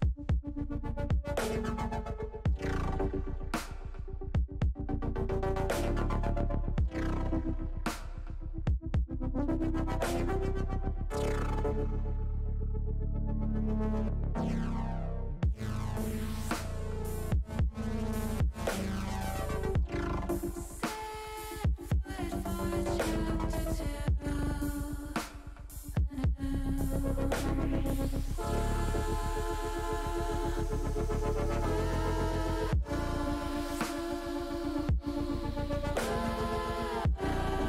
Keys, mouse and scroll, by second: 2.1 ctrl+click, 2.4 ctrl+z, 8.1 click, 9.1 click, 10.8 shift+click, 12.1 middle click, 13.2 shift+click, 13.8 shift+click, 14.4 shift+click, 15.2 shift+click, 16.1 middle click, 18.5 e, 21.4 click, 21.8-23.2 middle drag, 23.7 middle click, 25.1 middle click, 26.6 shift+click, 27.1 shift+click, 27.7 middle click, 29.0 shift+click, 29.4 middle click, 31.3 shift+click, 31.9 middle click, 33.4 shift+click, 33.8 shift+click, 34.1 middle click, 35.6 shift+click, 35.9 middle click, 37.4 shift+click.